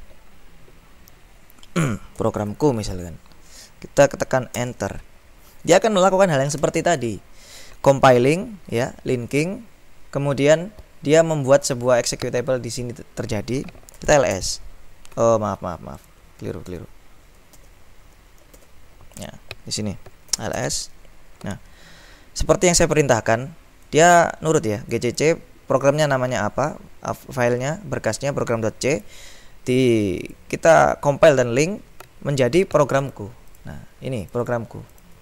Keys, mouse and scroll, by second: 2.0-2.9 typing, 4.6 Return, 8.9 click, 13.8-14.7 typing, 16.0 click, 16.7 ctrl+z, 17.5 ctrl+z, 18.6 ctrl+z, 19.4 click, 20.4 s, 20.6 Return, 23.9-25.7 drag, 29.0 click, 30.3 click, 33.0-34.1 scroll up 2, 34.3-35.0 scroll up 2.